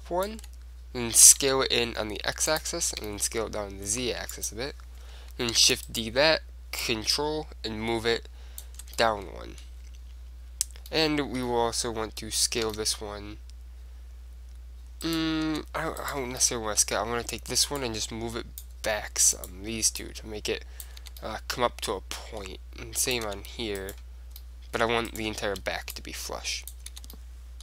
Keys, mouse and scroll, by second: 1.4 s, 2.7-4.4 drag, 3.1 s, 4.6-6.2 drag, 5.7 shift+d, 6.9-8.6 drag, 9.1-10.7 middle drag, 11.0-12.7 middle drag, 12.9 s, 15.3-17.8 right drag, 15.6 Tab, 16.5-17.8 drag, 17.8 middle click, 17.9-19.7 drag, 19.5-21.4 right drag, 20.1-22.2 drag, 21.2 Tab, 22.2 middle click, 23.2-27.1 right drag, 23.4 Tab, 24.5-27.6 drag, 27.1 Tab, 27.3 right click.